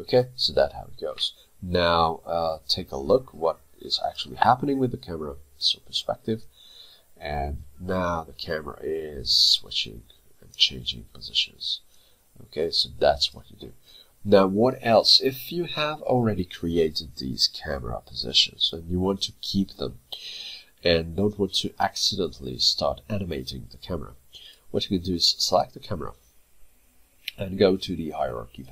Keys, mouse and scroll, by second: 2.5 middle click, 4.7 p, 6.5 click, 24.5 click.